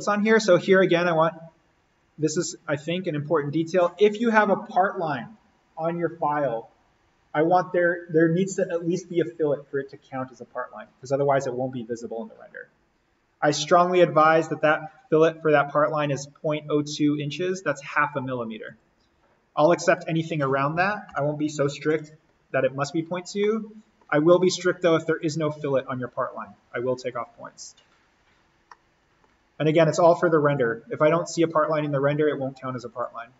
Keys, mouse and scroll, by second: 0.0 click, 18.6 click, 20.8-21.6 typing, 21.9 Tab, 22.7-23.3 scroll down 1, 23.4 middle click, 23.6 scroll down 1, 25.0 click, 28.2-28.6 scroll up 1, 28.7-30.5 middle drag, 30.5 click, 32.9 click.